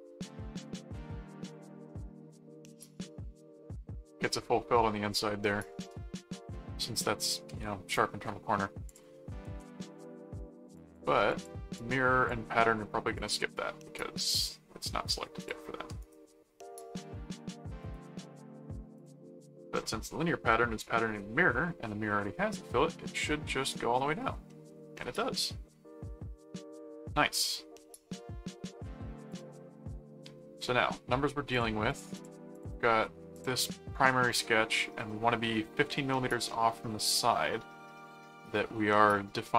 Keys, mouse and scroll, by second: 0.6 click, 1.4 click, 2.1 right click, 3.2 middle click, 4.3 middle click, 5.7 middle click, 8.9 click, 9.8 ctrl+s, 10.7-12.3 drag, 13.2 click, 14.2 click, 15.4 click, 16.0 right click, 17.8 right click, 18.9 click, 20.5 middle click, 22.1 middle click, 24.4 middle click, 25.2 middle click, 27.4 click, 27.7-28.9 middle drag, 29.3 click, 29.8 middle click, 31.5-33.1 drag, 33.3 click, 33.7 middle click, 35.1 middle click, 37.3 middle click.